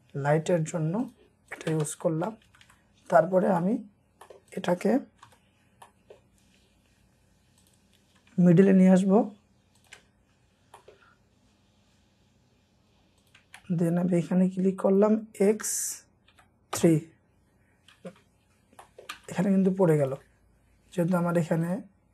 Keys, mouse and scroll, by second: 1.5 double click, 1.7 space, 1.8-2.3 scroll down 6, 2.5 Escape, 2.6 Escape, 2.9 scroll up 1, 3.6 middle click, 4.1 scroll up 1, 4.3 middle click, 4.8-5.3 scroll up 1, 5.3 typing, 5.4-5.9 scroll up 1, 5.9 middle click, 9.8 shift+click, 10.1-10.8 shift+scroll down 2, 10.8 middle click, 11.2 scroll up 1, 15.6 typing, 16.7 Return, 17.0 scroll down 1, 18.0 space, 18.2-18.8 scroll down 1, 18.8 middle click, 19.2 space, 19.7-20.2 scroll up 1, 21.7 ctrl+click.